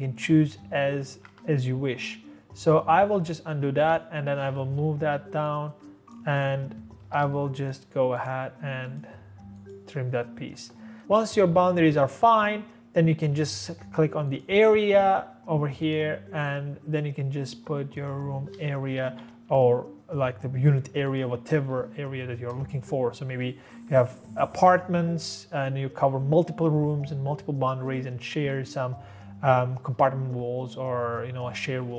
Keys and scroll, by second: 1.3 ctrl+z, 4.7 Escape, 4.8 Escape, 6.8-7.7 typing, 18.9 Escape, 19.0 Escape.